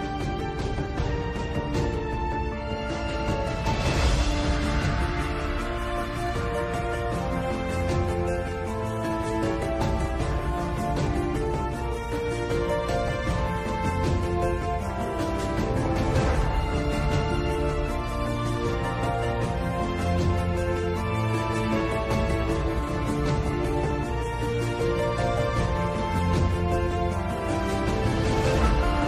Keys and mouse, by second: 0.9-3.8 drag, 9.8 middle click, 12.9-14.2 drag, 15.5-17.4 drag, 23.0 Tab, 24.5 KP_7, 26.4 KP_Divide.